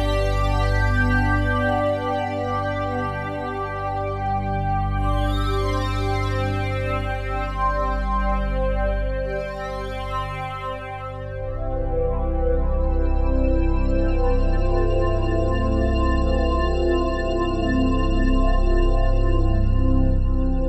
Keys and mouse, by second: 3.8 alt+click, 5.0 click, 5.8 click, 7.6 click, 7.9 click, 8.6 click, 9.2 alt+click, 10.0 alt+shift+click, 10.8 ctrl+alt+click, 11.2 alt+click, 12.0 click, 12.9 alt+shift+click, 13.4 alt+click, 14.1 ctrl+alt+click, 14.6 alt+shift+click, 15.2 ctrl+alt+click, 15.9 click, 17.1 alt+click, 17.7 alt+shift+click, 18.7 click, 19.3 click, 19.7 click.